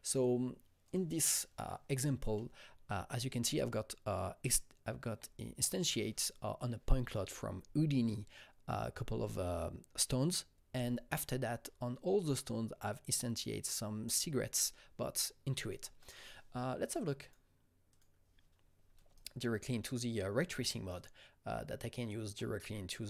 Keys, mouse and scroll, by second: 0.8 click, 0.8 space, 15.9 click, 15.9 space, 16.0 click, 17.2 click, 17.9 click, 19.1 alt+right click, 19.8 alt+middle click, 19.8-20.7 alt+scroll, 20.9-23.0 alt+right drag, 22.3-23.0 alt+middle drag.